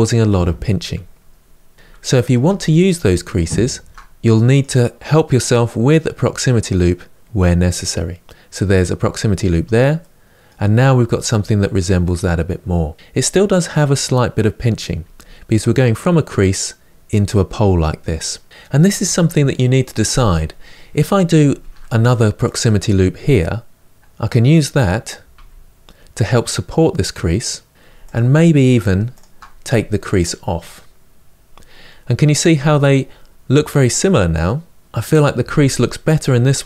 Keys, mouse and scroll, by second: 2.2 Tab, 2.5-3.9 middle drag, 3.9 ctrl+r, 9.2 Tab, 9.7-12.9 middle drag, 12.9-14.7 scroll up 3, 14.7 Tab, 21.3 ctrl+r, 25.0 Tab, 27.7 Tab, 27.8 click, 30.1-31.2 drag, 31.2 Tab, 31.5-32.2 scroll down 1, 32.2-34.8 middle drag.